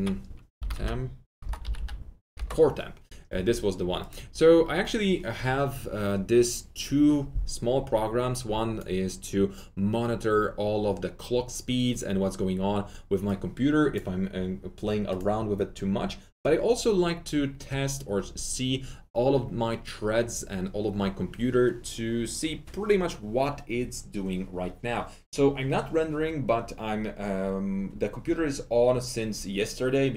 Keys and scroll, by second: 0.3-3.0 typing.